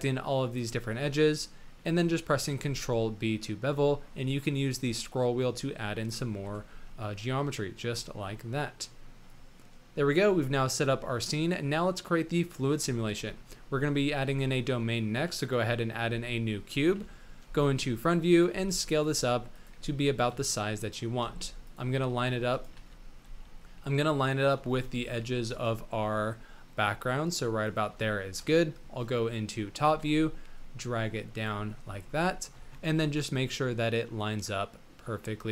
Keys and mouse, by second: 0.5 shift+click, 0.9 shift+middle click, 1.3 middle click, 2.4 ctrl+b, 6.4 Tab, 6.8-7.6 drag, 8.1-9.5 drag, 9.5-9.9 middle drag, 13.0 shift+a, 16.0-22.1 typing, 22.7 ctrl+z, 23.2 s, 24.7 shift+click, 25.4 s, 28.3 KP_7, 29.3 shift+drag, 29.8 g, 31.6 shift+drag, 32.3 shift+click, 32.8 g.